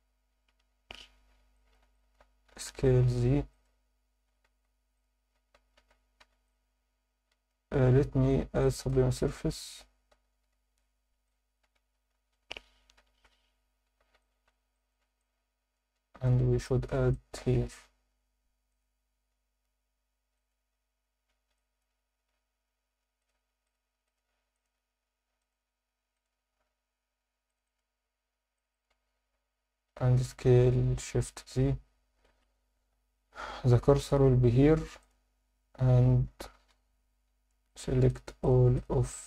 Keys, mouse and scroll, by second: 0.7 KP_3, 1.5 alt+shift+middle click, 1.9 ctrl+alt+middle click, 2.5 s, 2.7 z, 3.5 click, 4.3 s, 4.4 z, 4.9 click, 5.4 a, 6.2 b, 8.2 z, 8.6 alt+middle click, 10.3 Tab, 10.7 ctrl+2, 11.2 alt+middle click, 11.7 Tab, 12.1 a, 13.0 shift+n, 13.5 Tab, 13.9 Tab, 14.2 alt+shift+middle click, 14.7 ctrl+alt+middle click, 15.2-16.2 alt+middle drag, 16.6 shift+middle click, 17.1 ctrl+alt+middle click, 17.9 ctrl+r, 20.4 click, 21.6 alt+shift+middle click, 23.2 click, 23.6 shift+click, 24.1 shift+click, 24.5 shift+click, 25.4 shift+click, 26.1 shift+click, 27.4 shift+click, 27.6 shift+click, 28.5 shift+click, 28.7 shift+click, 34.0 click, 36.7 3, 37.6 click, 38.1 shift+click, 38.4 shift+click, 38.7 shift+click, 39.1 shift+click.